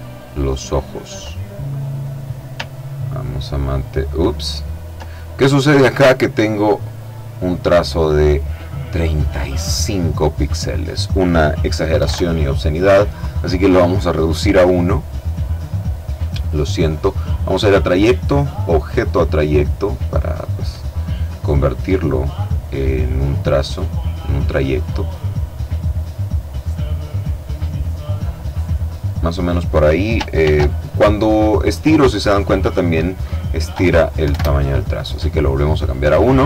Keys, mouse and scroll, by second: 1.8-4.5 ctrl+drag, 5.7 click, 11.2 KP_1, 11.2 KP_Enter, 14.4 click, 16.5 click, 17.9 click, 19.4 click, 20.7-22.3 drag, 22.5-24.7 drag, 25.1 click, 26.4-28.6 drag, 29.5 ctrl+shift+f, 32.0 click, 33.4 1, 33.4 Return, 35.2 click.